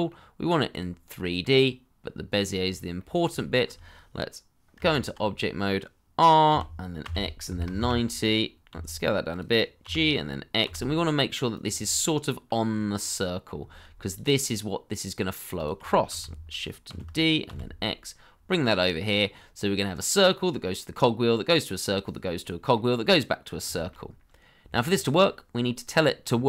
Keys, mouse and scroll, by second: 2.5-2.9 scroll up 1, 2.9 middle click, 3.3 shift+middle click, 4.7 Tab, 6.5 r, 7.0 x, 7.4 KP_9, 7.7 Return, 8.7 s, 9.8 g, 10.6 x, 11.8 middle click, 12.6-13.0 scroll down 1, 13.0 middle click, 13.5-14.3 scroll down 1, 15.9 shift+middle click, 16.9 shift+d, 17.4 x, 19.3 middle click, 22.4 middle click, 24.2 shift+middle click.